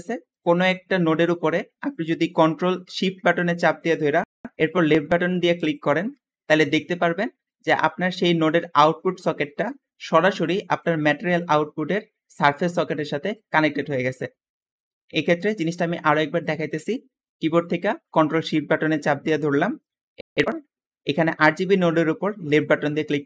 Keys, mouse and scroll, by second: 0.6 g, 6.4 scroll down 2, 7.5 `, 10.3 click, 11.2-12.2 drag, 12.6 click, 13.2 click, 14.3 Escape, 14.7 middle click, 15.1 middle click, 15.1 scroll down 2.